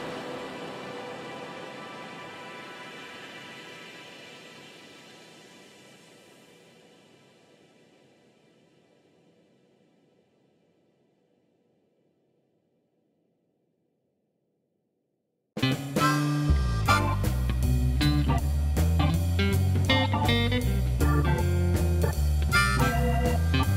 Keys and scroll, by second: 6.7 ., 6.8 2, 7.1 Return.